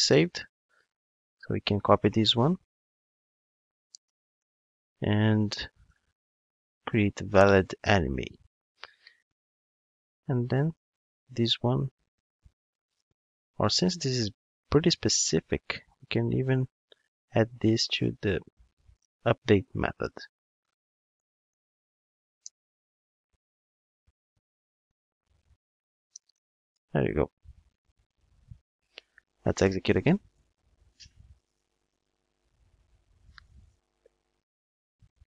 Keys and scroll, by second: 1.2 super+c, 4.4 super+v, 7.4 Return, 15.0 super+x, 19.4 super+v, 26.7 Return, 29.3 ctrl+shift+d.